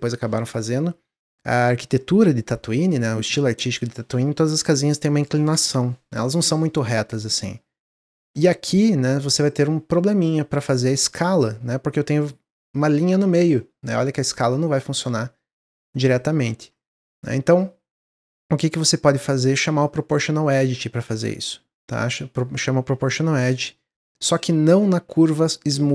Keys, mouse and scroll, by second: 7.0-11.0 middle drag, 11.0 s, 13.5-16.5 middle drag, 16.7-19.6 middle drag, 19.6 click, 21.0 ctrl+z, 22.9 s, 25.0 ctrl+z, 25.4-25.9 drag.